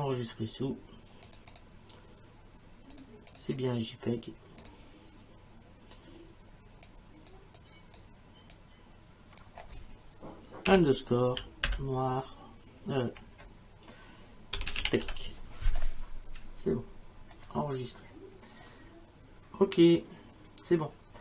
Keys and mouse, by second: 1.3 click, 3.0 click, 4.6 click, 6.9 click, 10.7 8, 11.7 shift+n, 13.4-15.6 typing, 17.4 click, 19.8 click.